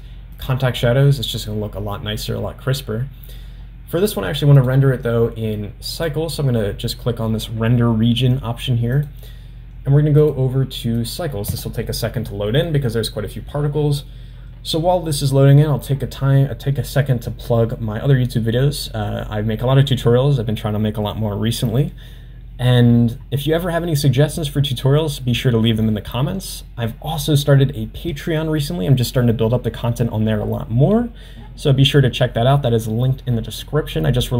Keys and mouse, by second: 0.6 click, 4.2 click, 6.2 click, 10.2-12.7 drag.